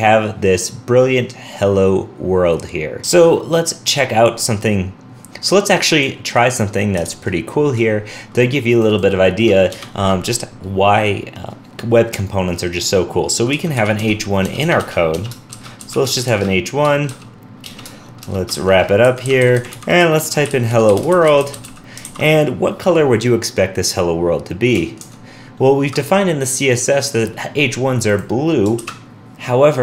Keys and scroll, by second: 22.1 super+s, 25.0 super+Tab, 28.8 super+r.